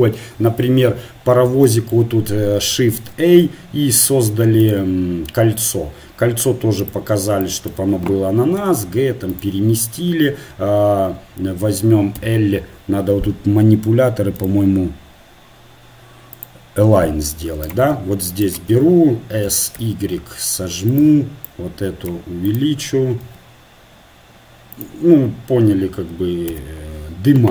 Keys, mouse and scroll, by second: 1.4 KP_3, 3.0 shift+a, 7.3-8.6 drag, 8.6 g, 12.2 l, 14.4-18.4 drag, 17.7 right click, 19.4-20.6 right drag, 19.7 s, 21.7 right click, 23.2 s, 26.5 l.